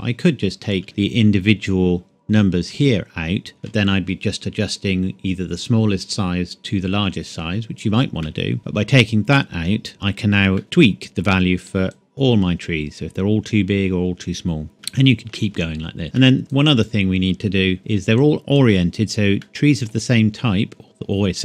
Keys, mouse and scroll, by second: 0.8 shift+middle click, 1.0-3.2 scroll up 1, 8.0 scroll up 1, 8.2 shift+middle click, 10.2 click, 10.6 middle click, 11.9 click, 14.8 middle click, 16.0 scroll down 1, 16.2 shift+middle click, 16.4 click, 18.1 click, 19.4 middle click.